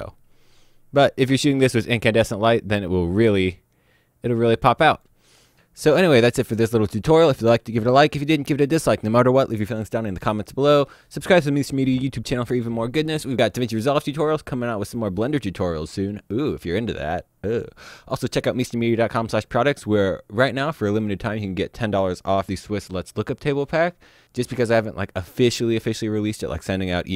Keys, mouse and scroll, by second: 4.9 click.